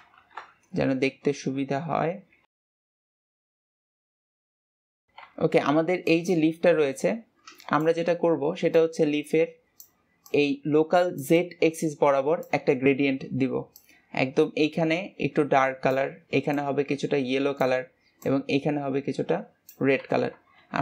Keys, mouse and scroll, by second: 0.2 KP_0, 1.3 r, 3.8 r.